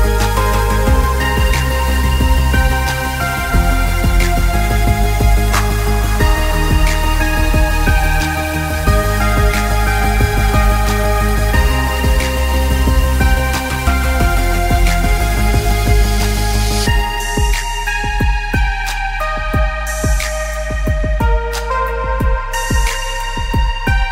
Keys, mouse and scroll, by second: 0.2 click, 0.3 space, 0.4 alt+scroll up 1, 0.6 click, 1.8-2.6 alt+scroll down 4, 2.6 s, 2.9 click, 3.4 scroll up 1, 4.2 click, 4.5-5.0 scroll down 1, 5.0 click, 5.7 click, 6.0 scroll down 1, 6.3 click, 7.1 click, 7.7 click, 8.4-8.8 scroll up 1, 8.8 click, 9.5 click, 10.6-11.3 scroll down 1, 11.3 click, 13.8 click, 13.9 scroll down 1, 15.8-16.2 scroll up 1, 16.2 click, 16.6-17.0 scroll down 1, 17.0 click, 17.5 click, 17.7 alt+scroll up 2, 18.1 click, 18.2 space, 18.4 alt+scroll down 2, 18.7 click, 19.3 click, 19.5-19.9 scroll down 1, 20.1 click, 20.5 scroll up 1, 20.9 click, 21.0 alt+scroll down 2, 21.2 click, 23.2 scroll down 1.